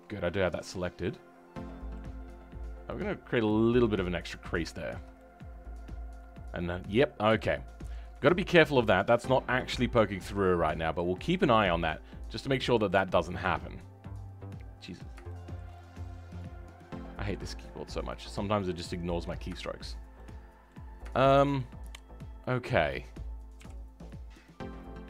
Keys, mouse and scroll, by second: 0.8-1.5 scroll down 9, 1.5-2.9 middle drag, 2.9-4.7 drag, 4.7-6.9 shift+middle drag, 6.9 scroll up 2, 7.3-11.7 shift+middle drag, 11.7-12.2 scroll down 2, 12.2-12.9 scroll up 2, 12.9-18.4 middle drag, 18.4-18.7 scroll down 6, 18.7-24.1 middle drag, 24.1-25.0 scroll up 4.